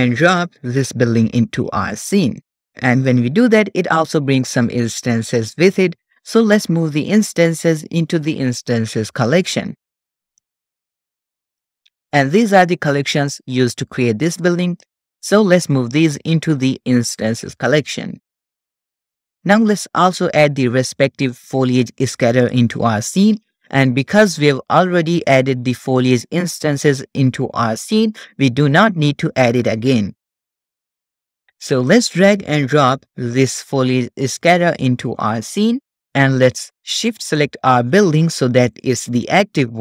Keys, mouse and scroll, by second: 10.0-10.6 drag, 11.5 click, 16.0-17.2 drag, 22.4 click, 25.2 click, 30.9 click, 31.9 click, 37.2-38.4 shift+drag, 38.4 middle click, 39.2 shift+middle click.